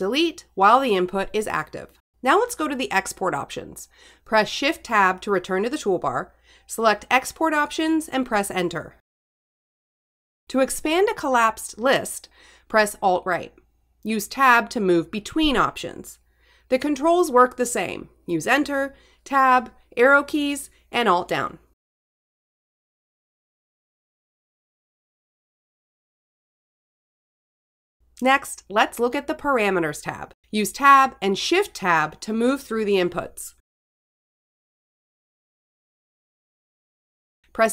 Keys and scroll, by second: 0.3 Delete, 4.7 shift+Tab, 7.3 Up, 8.1 Return, 11.6 Down, 13.9 alt+Right, 15.2 Tab, 17.2 alt+Down, 17.7 Down, 18.3 Return, 22.2 Tab, 25.0 Return, 30.9 shift+Tab, 35.2 Up.